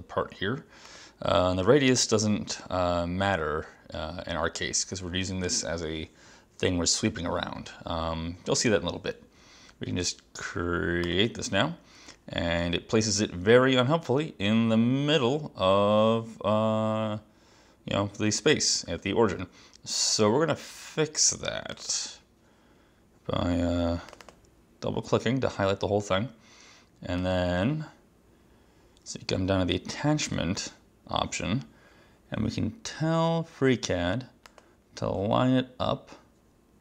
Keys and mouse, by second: 0.9 click, 21.8 click, 24.2 click, 24.3 click, 27.3 click, 30.4 click, 34.6 click.